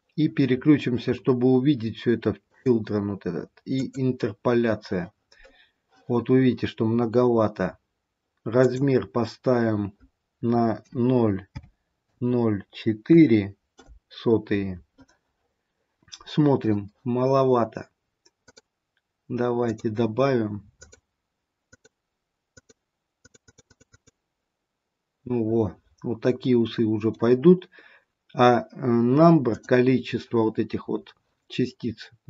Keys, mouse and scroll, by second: 0.1-2.4 scroll down 8, 1.0-2.4 scroll up 2, 2.4 click, 3.9 click, 7.1-7.7 scroll up 3, 7.7-8.6 scroll up 1, 8.6 click, 8.6-9.7 scroll up 1, 15.5-17.4 scroll up 3, 18.4 click, 19.7 click, 21.8 click, 22.7 click, 23.8 click, 24.1 click, 24.3 click, 26.2-26.8 scroll down 1, 26.8 middle click, 29.4 click.